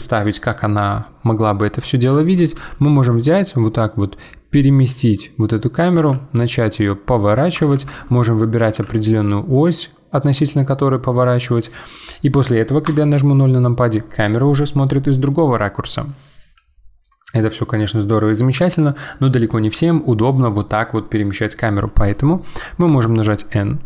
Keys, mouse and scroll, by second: 5.9 r, 8.1-8.6 middle drag, 8.6 r, 12.8 KP_0, 22.9 n.